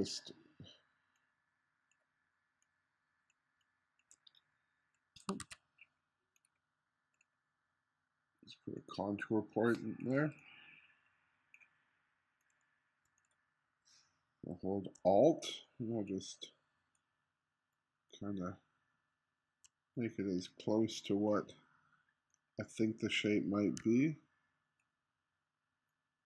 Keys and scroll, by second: 5.4 super+z.